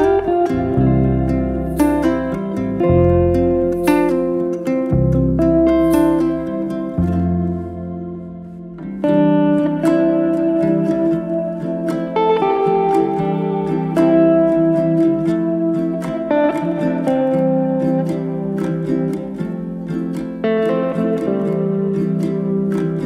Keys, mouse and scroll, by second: 2.1 click, 3.2-4.7 drag, 4.8 click, 8.1 click, 8.6 click, 10.0 r, 16.0 click, 20.1 click, 22.9 click.